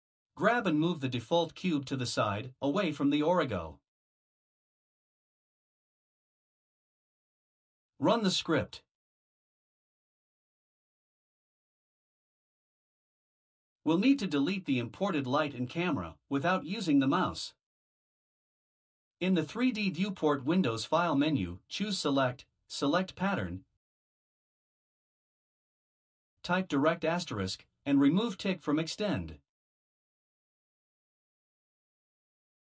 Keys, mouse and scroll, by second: 2.7 g, 9.4 click, 14.1 click, 20.8 click.